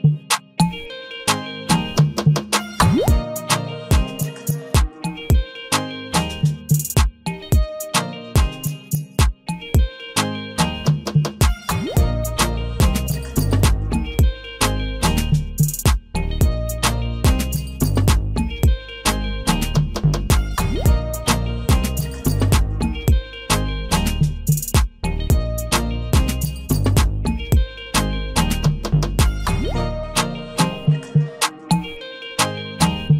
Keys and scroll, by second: 6.9 ctrl+t.